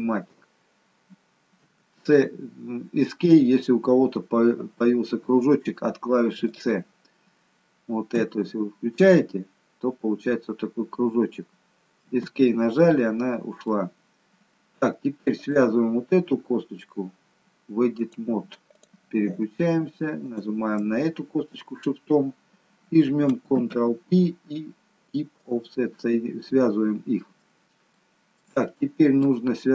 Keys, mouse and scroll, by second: 7.4-8.4 scroll up 1, 8.4 c, 13.0-13.6 scroll up 1, 13.6 middle click, 15.4 click, 18.0 click, 20.3 shift+click, 23.6 ctrl+p, 27.0-27.5 scroll down 1, 27.5-28.0 scroll down 1, 28.0 shift+middle click, 28.7 middle click, 29.6-29.7 scroll up 2.